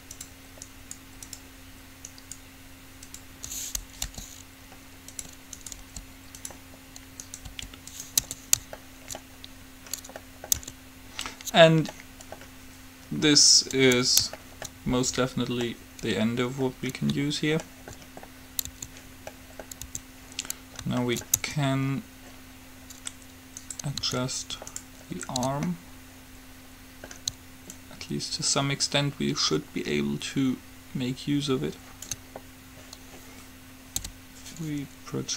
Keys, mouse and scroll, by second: 4.4 g, 5.8-8.9 drag, 6.0 g, 7.7 g, 8.4 Tab, 10.8 Tab, 14.0 Tab, 18.9 Tab, 20.0 Tab, 21.6 Tab, 23.0 middle click, 23.8 click, 24.7-26.0 right drag, 25.8 click, 27.9-29.8 drag, 34.2 u.